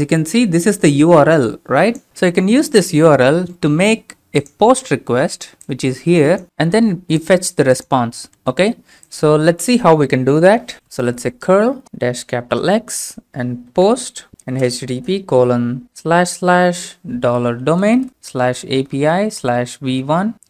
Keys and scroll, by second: 9.3 alt+Tab, 10.9-12.4 typing, 13.7-16.0 typing, 17.3-20.4 typing.